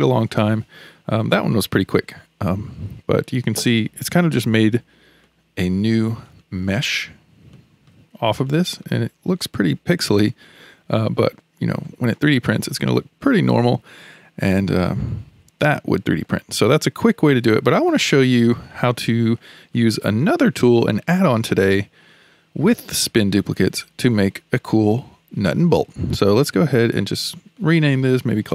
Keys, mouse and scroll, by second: 3.6-4.5 scroll up 3, 4.5-5.2 scroll up 3, 5.2 shift+middle click, 5.9-6.4 scroll up 1, 6.4-8.0 shift+middle drag, 8.0-8.5 scroll up 4, 8.5-10.6 middle drag, 10.6-11.7 scroll down 8, 11.7-12.7 shift+middle drag, 12.7-13.0 scroll down 3, 13.0-27.2 shift+middle drag, 27.6 click, 27.8-28.5 drag.